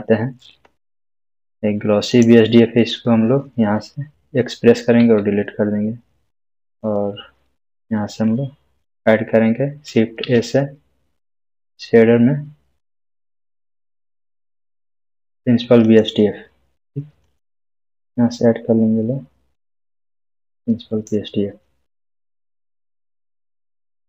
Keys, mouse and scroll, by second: 2.1 click, 5.0 click, 9.7-10.7 typing, 15.8 shift+a, 19.3 click, 19.9-21.2 drag.